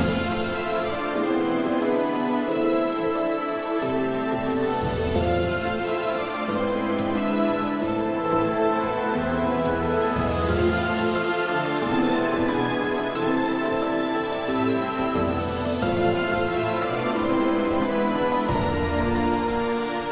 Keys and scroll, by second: 6.9 g, 11.1 g, 17.7 s, 19.3 g.